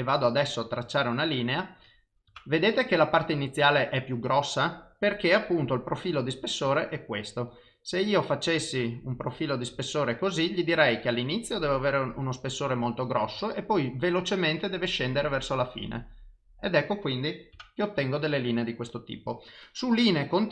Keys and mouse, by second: 0.7 click, 5.5 click, 15.3 click, 19.7 click.